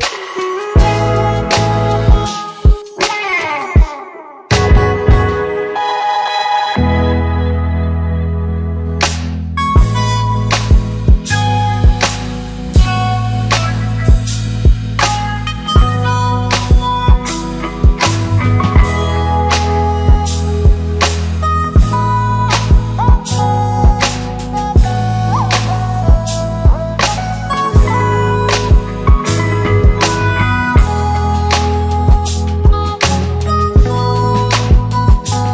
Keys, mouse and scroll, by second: 3.6 shift+click, 4.8 u, 6.1 scroll down 2, 6.8 scroll up 1, 8.8-10.0 click, 10.5-11.3 scroll up 1, 11.3-12.6 click, 13.5-15.4 click, 16.7 click, 24.7 click, 27.2 click, 33.3 click.